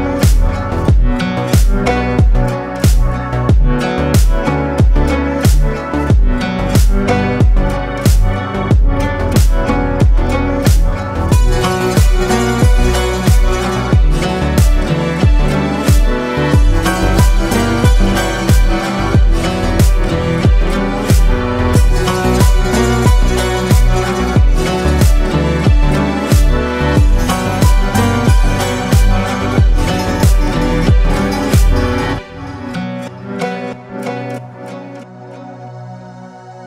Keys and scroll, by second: 0.5 Tab.